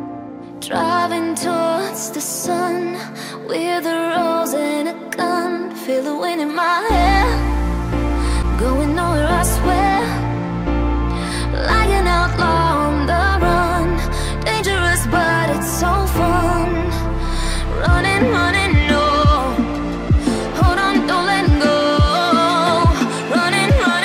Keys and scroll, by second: 15.4 ctrl+g, 16.6 ctrl+alt+shift+e, 19.3 ctrl+0.